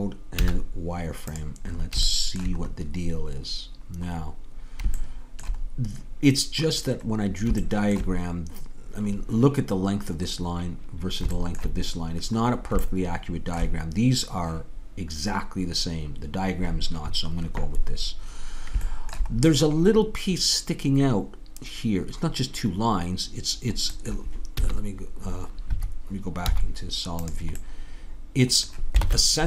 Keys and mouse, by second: 0.4 z, 1.9 middle click, 2.6 middle click, 4.0 middle click, 4.6-9.3 middle drag, 24.6 z, 26.5 z, 29.1 ctrl+Tab.